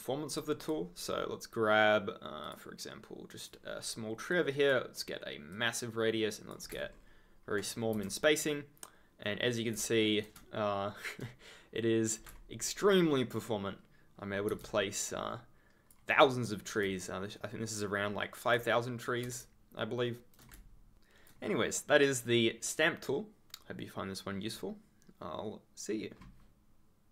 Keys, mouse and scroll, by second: 0.2 click, 2.4 click, 3.3 click, 6.6 click, 6.8 ctrl+scroll down 1, 7.9 F3, 8.4 right click, 13.1 ctrl+click, 13.2 ctrl+scroll down 1, 14.0 ctrl+scroll down 1, 14.6 ctrl+z, 15.3 scroll up 1, 15.3 scroll, 15.5-16.4 scroll up 1, 16.8 s, 16.9 right click, 19.3 shift+s, 20.9 ctrl+scroll down 1.